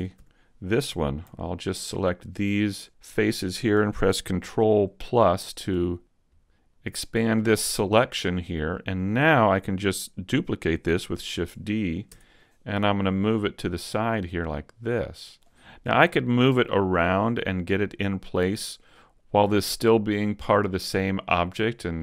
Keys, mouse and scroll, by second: 2.1 alt+right click, 4.7 ctrl+KP_Add, 5.2 ctrl+KP_Add, 5.7 ctrl+KP_Add, 6.3 ctrl+KP_Add, 6.7 ctrl+KP_Add, 7.9 middle click, 8.7 shift+middle click, 11.3 shift+d, 14.3 click, 16.1 shift+middle click, 16.7 middle click, 18.8 middle click.